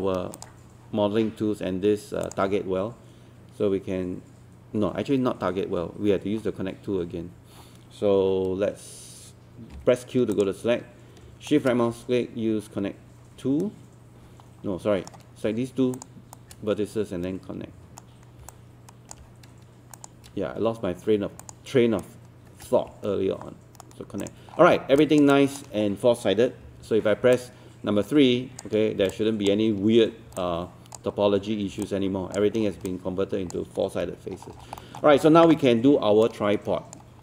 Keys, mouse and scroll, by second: 9.7 q, 10.3 click, 11.5-15.4 shift+right drag, 16.0 shift+click, 16.3-18.4 shift+right drag, 18.5 alt+click, 20.0 click, 21.4 shift+click, 22.0-24.3 shift+right drag, 24.3 click, 24.5 scroll down 1, 25.0 alt+click, 25.8-26.7 scroll up 1, 26.7-27.1 scroll up 2, 27.4-28.6 alt+drag, 29.1 alt+click, 30.4 alt+click, 31.1-31.7 scroll up 1, 31.9 alt+click, 32.6 scroll down 1, 32.9 alt+click, 34.3 scroll down 1, 34.8 alt+middle click, 36.3 right click.